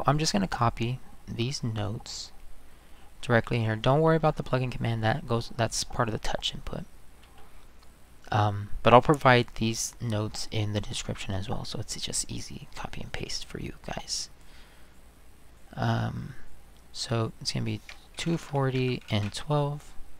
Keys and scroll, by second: 17.9-19.6 typing.